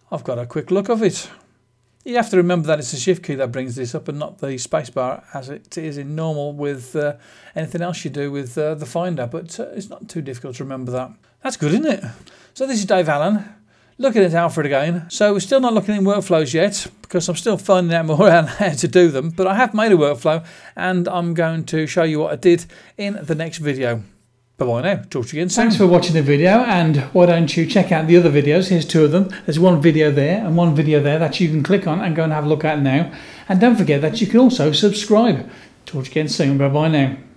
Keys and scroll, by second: 9.7 Escape, 10.8 BackSpace.